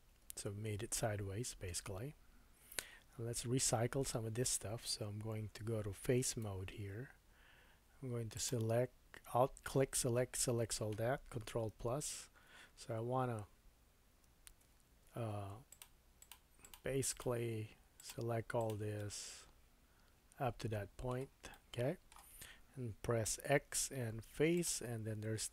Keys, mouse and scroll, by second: 2.8 Tab, 6.4 3, 8.3 alt+click, 11.7 ctrl+KP_Add, 14.2 ctrl+KP_Add, 15.7 shift+click, 16.2 shift+click, 16.6 shift+click, 17.1 shift+click, 17.9 shift+click, 18.6 shift+click, 19.0 middle click, 21.5 middle click, 23.3 x.